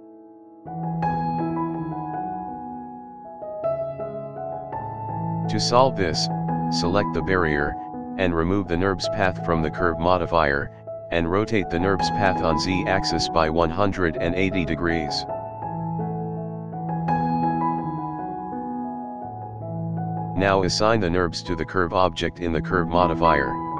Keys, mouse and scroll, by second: 4.9 click, 5.5 scroll down 1, 5.6 scroll up 1, 5.9-6.2 scroll down 1, 6.2 click, 7.0-8.8 scroll down 5, 8.8 click, 9.8 scroll up 1, 9.9 scroll down 1, 10.2 click, 11.2 click, 11.6 Left, 12.7-14.0 drag, 16.8-17.6 scroll up 2, 17.1-17.6 middle drag, 18.7 click, 19.5-20.2 scroll down 4, 20.4 click, 22.0 scroll down 2, 22.3-22.8 scroll up 2, 22.8-23.1 shift+middle drag, 23.2-23.6 scroll up 2, 23.6-23.7 middle drag.